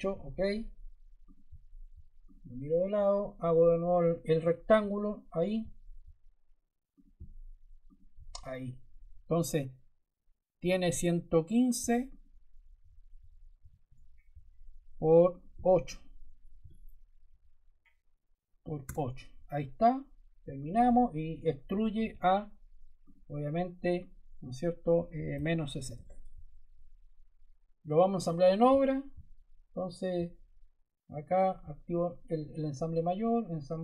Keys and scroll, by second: 10.5 d, 12.7 1, 13.5 5, 13.7 Return, 16.5 8, 18.6 Return, 21.9 e, 25.0-26.3 typing.